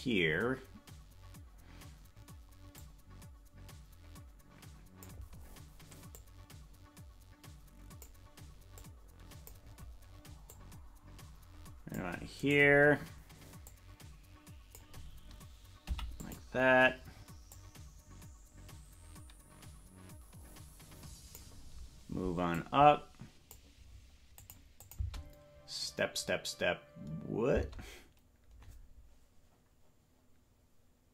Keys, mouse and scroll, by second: 2.8-5.2 drag, 6.1-8.1 drag, 8.8 click, 10.5-12.0 drag, 12.5 right click, 13.7-14.9 drag, 15.8 i, 17.6-21.5 drag, 22.5-23.5 drag, 24.4 click, 24.8-27.3 drag, 27.3 space.